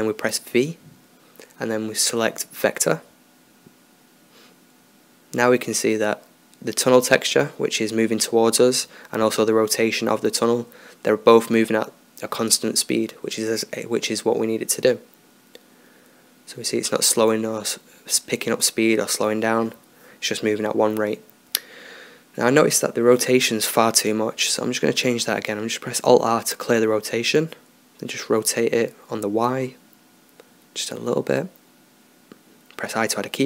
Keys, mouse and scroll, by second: 1.0 v, 6.5-10.3 drag, 10.3-11.6 middle drag, 11.6-13.6 drag, 15.9-17.8 drag, 22.4-24.4 drag, 25.0 alt+r, 27.9 r, 32.7 i.